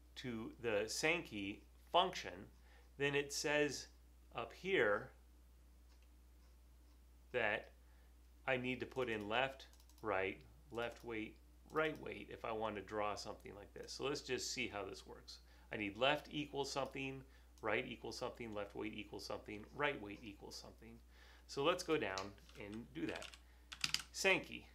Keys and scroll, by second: 22.9-24.5 typing.